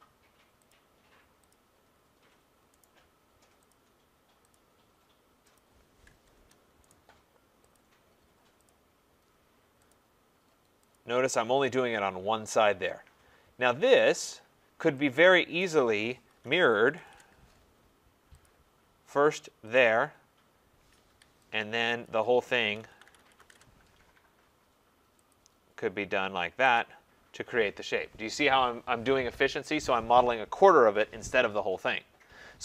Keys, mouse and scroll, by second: 0.7 click, 1.5 click, 1.9 middle click, 1.9-2.3 scroll down 3, 2.4 scroll up 3, 2.8 right click, 3.7 click, 4.6 click, 5.6 click, 6.3 Return, 6.9 right click, 7.7 click, 8.6 click, 9.9 click, 10.9 click, 11.4 scroll, 14.0 right click, 14.4-14.9 scroll, 15.6 click, 16.4-17.0 typing, 17.1 Return, 18.4 click, 19.8 click, 20.7 typing, 21.1 Escape, 22.1 click, 22.8-23.5 typing, 24.5-25.3 typing, 25.3 click, 26.8 click.